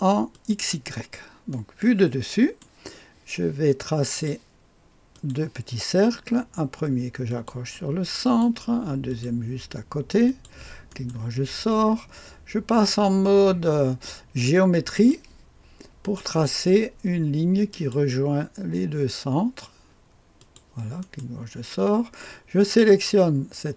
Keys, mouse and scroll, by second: 0.3 click, 1.5-3.3 right drag, 4.1 click, 5.1 click, 7.5 click, 8.4 click, 9.2 click, 10.2 click, 10.9 middle click, 10.9-14.9 right drag, 14.9 click, 14.9 middle click, 16.2 click, 17.7 click, 20.3 click, 21.0 middle click, 21.0 right click, 21.8 click, 22.6 click.